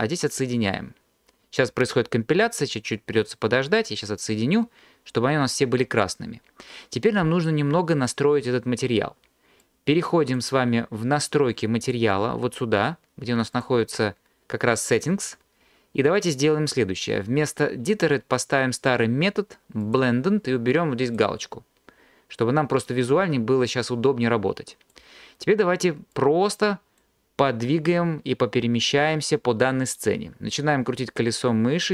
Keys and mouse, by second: 9.6 click, 13.5 click, 15.0 click, 17.9-20.1 drag, 21.1 click, 23.1 click.